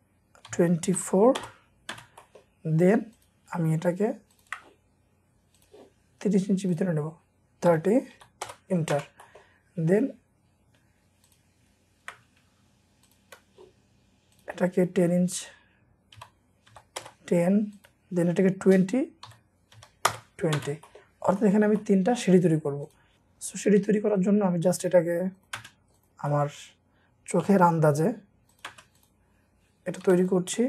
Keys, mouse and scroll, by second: 0.5-1.9 typing, 1.8 Return, 2.2-3.2 scroll up 1, 3.2 middle click, 3.2 scroll, 4.4 ctrl+click, 7.7-9.0 typing, 8.5 Return, 9.2 middle click, 9.5-10.1 scroll up 1, 13.0 ctrl+click, 16.2-16.7 typing, 17.0 Return, 19.3-20.6 typing, 20.1 Return, 20.8 scroll up 1, 20.8 middle click, 21.3 scroll up 1, 21.4 middle click, 22.5-23.2 scroll up 1, 23.6 typing, 23.9-24.4 scroll up 1, 24.4 scroll up 2, 25.6 p, 26.3-26.7 scroll up 1, 28.0 p, 29.4-29.9 scroll up 1, 30.1 typing.